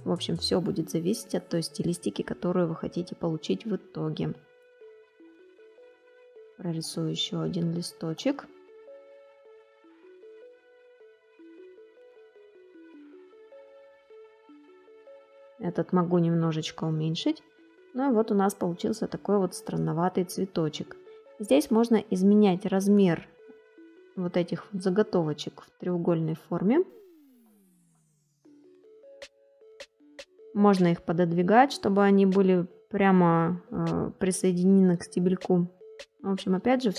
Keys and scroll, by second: 27.0 space.